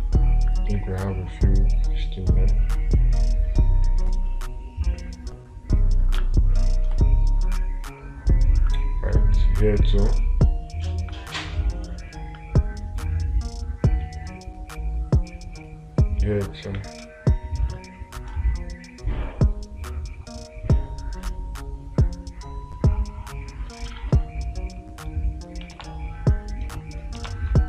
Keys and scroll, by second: 6.6 space, 26.3 space.